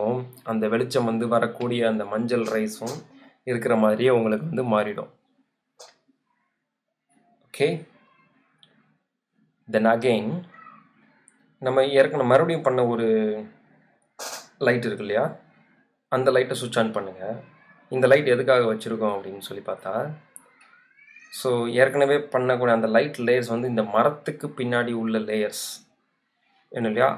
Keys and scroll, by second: 19.6 super+z, 23.6 super+t.